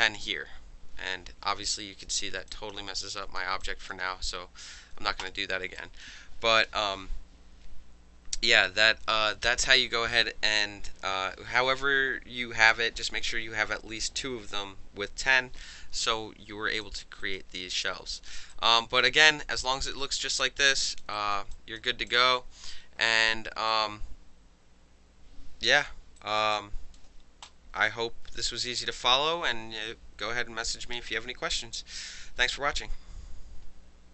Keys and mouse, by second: 1.8 ctrl+z, 2.5 alt+click, 2.7 ctrl+alt+middle click, 3.6 alt+drag, 3.9-5.2 alt+middle drag, 5.2 click, 5.3 middle click, 5.8 alt+click, 16.8 alt+click, 17.2 alt+right drag, 18.1 alt+drag, 18.3 alt+middle click, 18.5 alt+right click, 18.6 alt+middle click, 18.8 alt+click, 19.0-20.2 alt+middle drag, 20.2 alt+click, 20.4 alt+middle click, 20.7-21.0 alt+drag, 21.0 alt+middle click, 21.1 alt+right drag, 21.3 alt+middle click, 21.5 alt+click, 21.8-23.7 alt+middle drag, 22.1 alt+click, 23.7-25.9 alt+drag, 25.9 alt+middle click, 26.2 alt+drag, 26.4 alt+middle click, 26.5-27.0 alt+drag, 27.0-27.7 alt+middle drag.